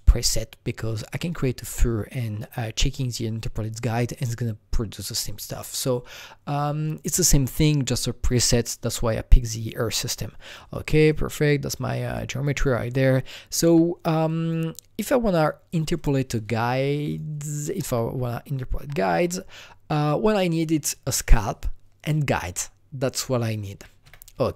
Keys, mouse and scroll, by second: 8.4 click, 10.9-15.3 drag, 15.3 shift+click, 17.1 click, 17.7 Left, 17.8 Left, 18.8 Left, 24.0 Escape, 24.0 Left.